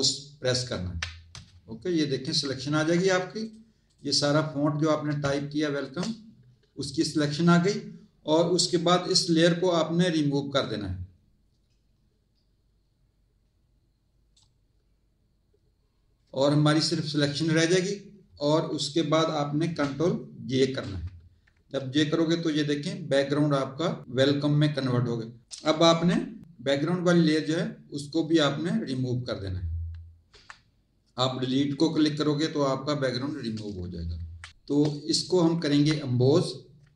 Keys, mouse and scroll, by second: 0.6 ctrl+click, 2.7 z, 3.4 click, 5.2 space, 5.3 click, 10.6 click, 20.6 ctrl+j, 27.3 click, 28.8 click, 30.3 Delete, 34.1 Tab, 34.5 click, 35.1 click.